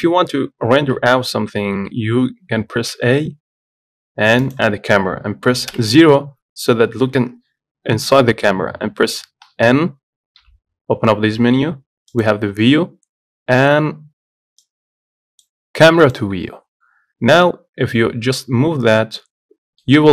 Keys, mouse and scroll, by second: 0.6-1.6 scroll down 3, 1.6 shift+a, 2.4 shift+a, 6.0 KP_0, 10.6 n, 13.1 click, 14.9-17.1 drag, 17.1-18.5 scroll down 6, 18.5 scroll up 2, 19.2 scroll down 3.